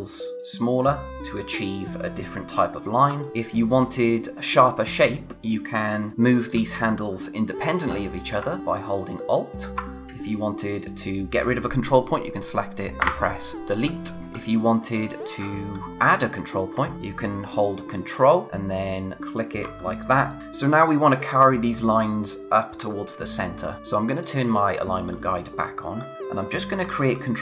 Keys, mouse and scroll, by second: 2.9 z, 3.7 click, 8.9 alt+click, 13.7-14.2 scroll down 1, 14.2 click, 14.3-14.7 scroll up 1, 14.8 click, 15.2-16.7 scroll down 1, 19.2 click, 19.6 scroll down 1, 20.0 space, 20.2 click, 20.4-21.9 scroll down 1, 25.0-25.5 scroll up 1.